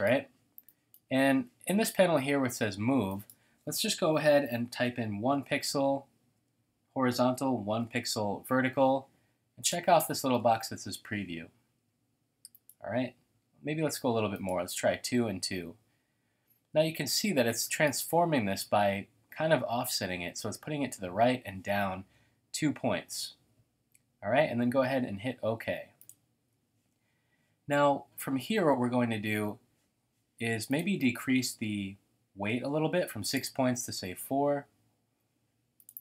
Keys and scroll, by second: 4.8-5.6 typing, 6.2 Tab, 7.1-8.3 typing, 10.2-10.9 typing, 13.3-15.6 typing.